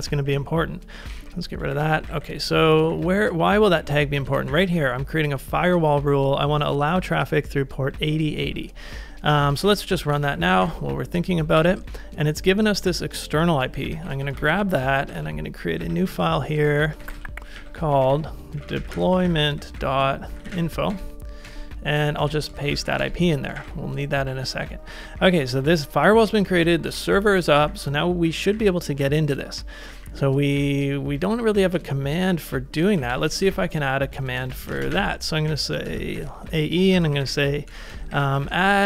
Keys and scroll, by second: 0.0-5.2 typing, 9.2-10.6 typing, 10.6 ctrl+a, 11.3 super+v, 11.6 Return, 11.8 typing, 13.7 super+c, 14.1 super+c, 14.3 ctrl+a, 15.0 ctrl+a, 15.8 a, 16.7 ctrl+c, 16.9-28.1 typing, 21.5 Return, 22.3 super+v, 29.7-38.8 typing, 33.5 ctrl+c, 33.5 ctrl+k.